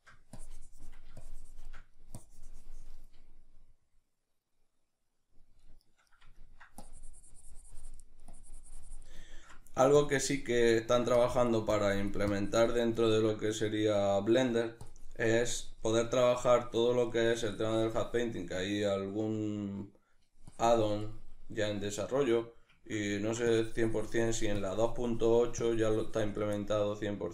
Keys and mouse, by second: 0.4 click, 2.3-4.8 drag, 4.8-6.9 middle drag, 6.9-9.3 drag, 9.3 ctrl+middle click, 10.0 click, 10.7 ctrl+middle click, 11.2-13.1 drag, 13.1-14.8 ctrl+middle drag, 14.8-19.6 drag, 19.6 middle click, 20.5 click, 21.3-23.5 middle drag, 23.5-26.6 drag, 26.6-27.3 middle drag.